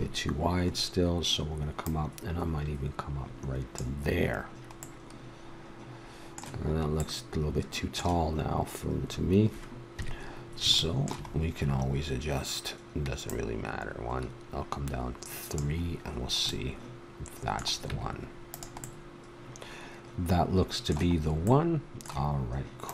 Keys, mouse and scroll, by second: 0.9-3.0 middle drag, 3.0 click, 4.8-7.0 middle drag, 7.3-8.9 middle drag, 9.9 KP_3, 13.3-15.5 drag, 15.9 middle click, 16.9 middle click, 17.9 Tab, 21.3-22.3 middle drag.